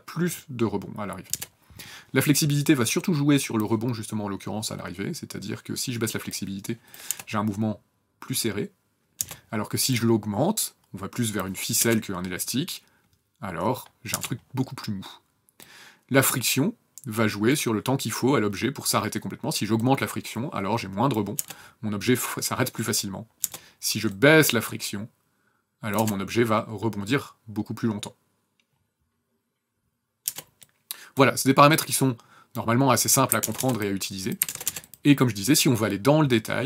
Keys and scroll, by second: 1.3 KP_0, 7.1 KP_0, 9.2 KP_0, 11.8 KP_0, 14.1 KP_0, 21.4 KP_0, 23.4 KP_0, 25.9 KP_0, 30.2 KP_0, 33.3-34.5 typing.